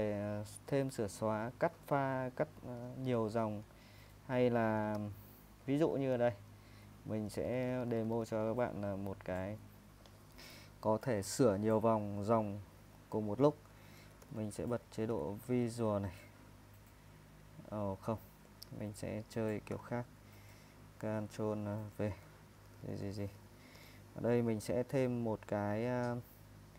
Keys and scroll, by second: 1.2-8.1 typing, 13.8-16.5 typing, 17.4 ctrl+r, 17.7-20.4 typing, 21.9 ctrl+v, 22.7-23.8 typing.